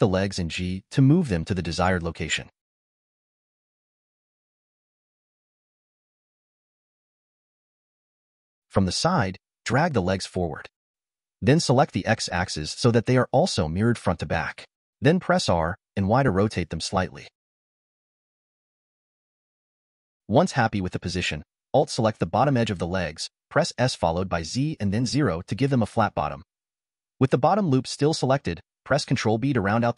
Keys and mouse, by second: 0.1 g, 6.0 click, 7.3 a, 8.7 g, 12.8 click, 15.3 r, 19.0 middle click, 20.8 alt+click, 22.4 s, 24.2-26.3 drag, 27.4 click, 27.9 shift+click.